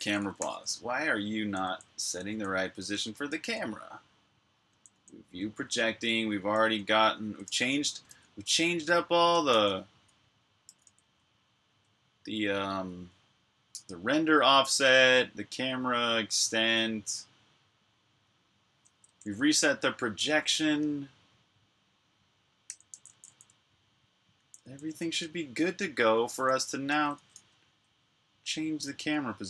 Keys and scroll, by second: 0.0-0.2 typing, 4.3-5.1 typing, 6.2-7.2 typing, 9.5-12.8 typing, 13.8 k, 15.5-16.3 typing, 18.5-20.2 typing, 22.5-23.0 typing, 24.2-29.4 typing.